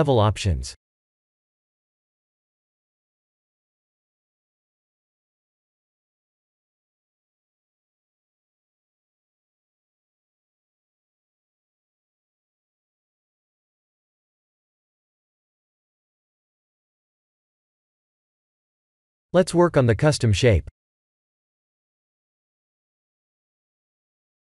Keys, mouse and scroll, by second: 3.3 click, 4.1 click, 5.1-10.6 middle drag, 11.4-11.8 middle drag, 12.8-16.7 shift+drag, 21.2 click.